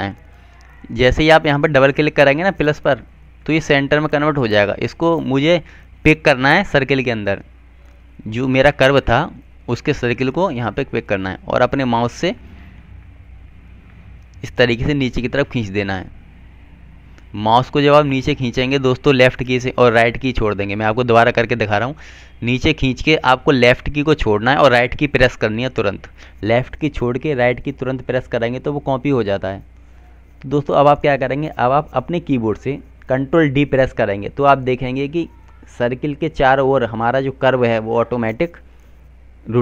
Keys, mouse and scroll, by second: 4.8 click, 11.8 click, 16.2 right click, 20.7 ctrl+z, 22.9 click, 27.7 right click, 34.2 ctrl+d.